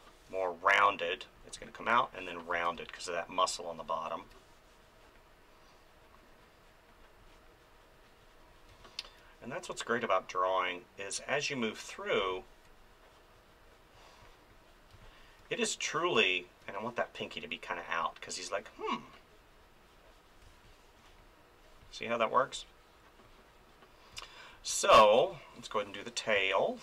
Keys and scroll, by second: 2.5 space, 8.7 space, 12.2 space, 14.9 space, 20.4 space, 26.3 space.